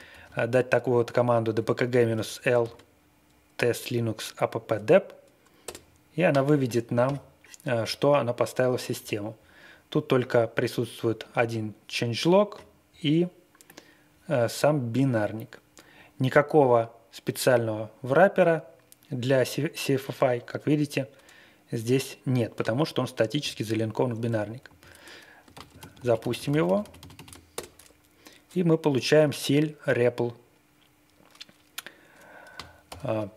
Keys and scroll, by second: 0.1 ctrl+a, 1.4 Right, 1.6 Right, 1.8 Right, 1.9 Right, 2.1 typing, 2.6 ctrl+e, 5.6 Return, 24.6 super+v, 25.5 ctrl+a, 25.7 ctrl+d, 32.8-33.3 typing.